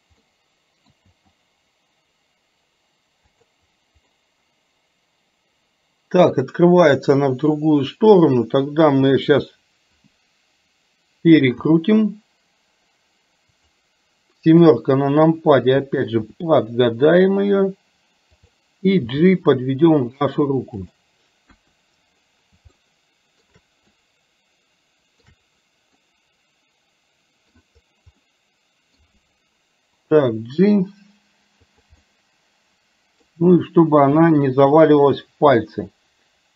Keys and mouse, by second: 0.3 middle click, 1.1 g, 4.2-9.3 middle drag, 11.7 r, 14.7 KP_7, 16.3 r, 19.2 g, 21.7 KP_1, 22.8 shift+middle click, 24.0-25.3 shift+middle drag, 26.2-27.6 middle drag, 28.3 middle click, 30.2 g, 32.1-33.3 middle drag, 34.3 r, 35.6 g.